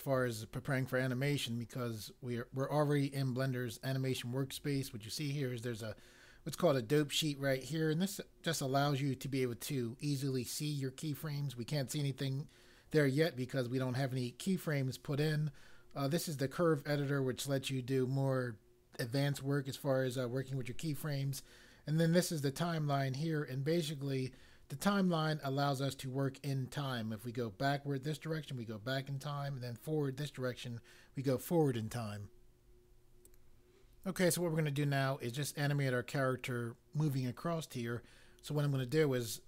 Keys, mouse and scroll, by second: 33.2 click.